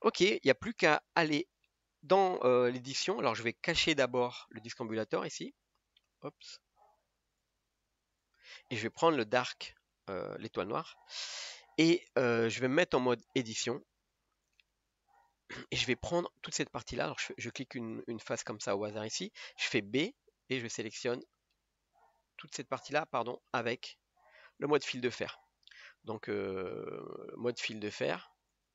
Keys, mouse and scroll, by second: 0.9 click, 1.3 scroll down 2, 1.7-5.0 middle drag, 5.0-7.5 drag, 8.2 click, 10.2-12.1 middle drag, 12.1 KP_3, 15.3-17.4 drag, 22.1 b, 24.6 click, 25.9 1, 28.1 click, 28.5 click.